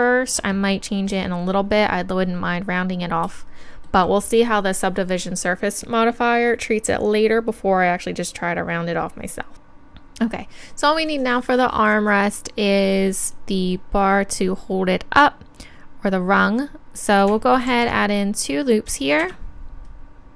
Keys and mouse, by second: 9.5 ctrl+z, 13.3 middle click, 13.5-15.6 middle drag, 17.7 ctrl+r.